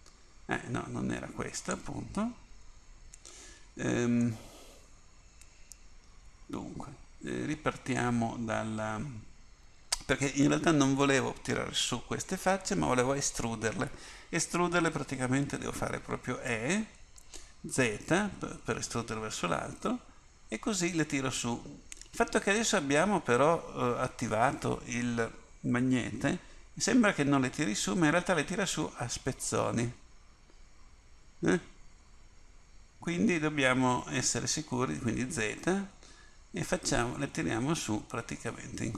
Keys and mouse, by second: 4.3-6.4 middle drag, 16.5 e.